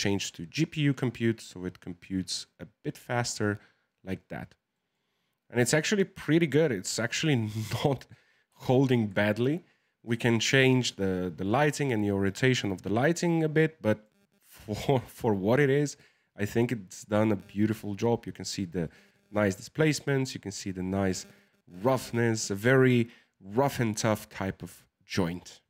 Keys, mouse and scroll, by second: 3.0-25.5 middle drag.